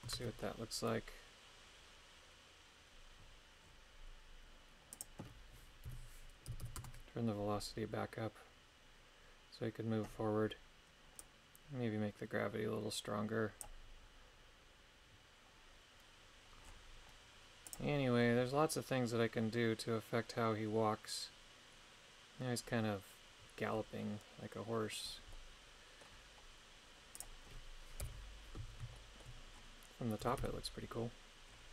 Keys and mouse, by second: 0.1 shift+space, 4.9-6.9 drag, 6.7 KP_9, 11.2-13.7 drag, 17.7 click, 25.3 middle click, 27.2 click, 28.0 KP_7, 29.0 shift+middle click, 30.2 a, 30.4 a.